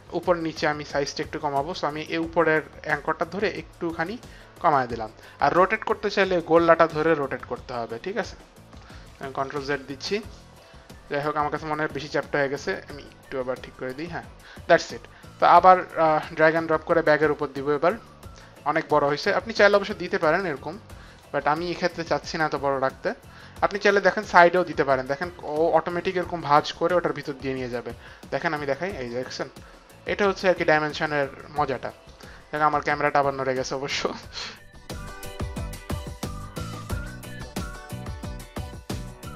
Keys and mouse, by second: 0.9 click, 6.6 click, 9.4 ctrl+z, 12.5 click, 15.8 click, 19.1 click, 23.5 click, 27.7 right click, 30.3 right click, 32.9 middle click, 35.3 right click, 35.9 right click, 36.4 middle click, 36.9 right click, 38.6 click.